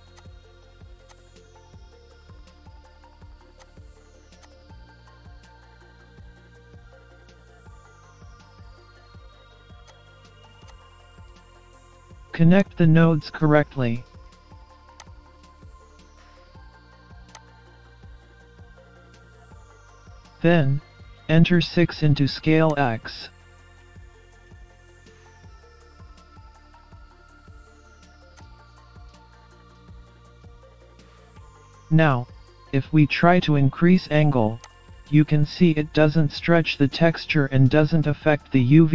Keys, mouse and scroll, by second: 1.8 shift+a, 4.6-5.2 scroll up 3, 5.3 middle click, 6.7 shift+a, 11.2 scroll down 3, 11.5 scroll up 2, 12.6 click, 15.0 click, 17.4 click, 19.7 middle click, 21.4-22.7 scroll up 4, 22.7 click, 22.7 scroll up 1, 25.2-26.2 scroll down 7, 26.2 scroll down 1, 26.3 scroll up 1, 27.0 scroll up 1, 27.3 middle click, 28.3 click, 30.0 scroll down 3, 30.2 scroll up 1, 30.2 middle click, 30.9 scroll up 1, 32.5 middle click, 34.7 click, 38.4 scroll down 4, 38.7-38.9 scroll up 2.